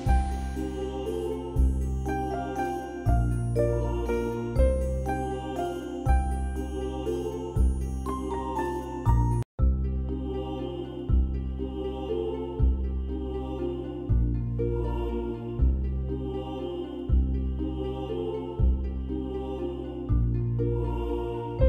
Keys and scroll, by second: 0.7 ctrl+v, 2.0 ctrl+BackSpace, 2.3 c, 2.7 ctrl+alt+b, 3.9 ctrl+=, 4.0 ctrl+=, 4.1 ctrl+=, 4.4 space, 6.3 space, 7.7 space, 8.8 space, 9.9-11.8 typing, 15.9 space, 18.9 ], 19.3 x.